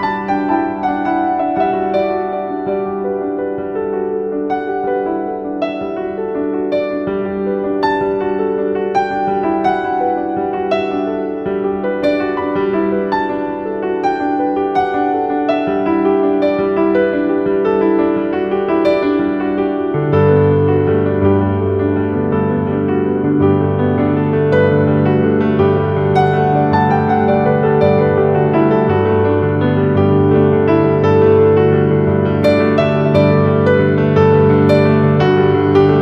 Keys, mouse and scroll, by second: 0.0-0.3 typing, 0.4 click, 2.4-3.9 shift+drag, 3.9-8.4 shift+drag, 8.4 shift+click, 9.5 z, 9.7 click, 10.0 space, 10.1 click, 10.4 z, 10.5 click, 13.4 ctrl+z, 14.1 click, 19.7 ctrl+z, 21.6-26.4 drag, 26.4-29.4 typing, 26.5 click, 27.0 click, 27.3 click, 27.9 click, 28.3 click, 28.7 click, 29.0 click, 32.2 click, 32.8-36.0 shift+drag.